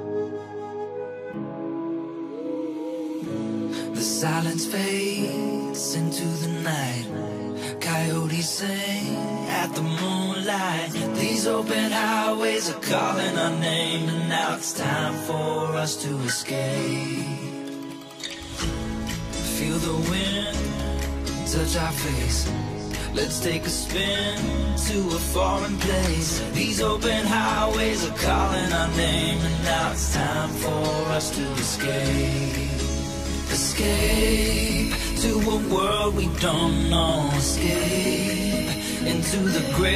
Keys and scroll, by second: 14.2 Return, 23.8 Right, 25.1 Return.